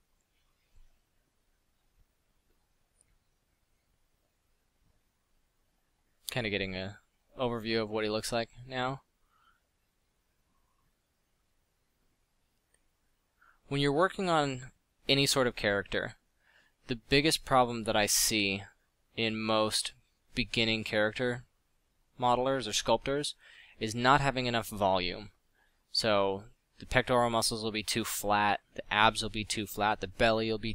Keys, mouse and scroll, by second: 7.7 f, 14.0 f, 18.5 f, 25.6 f.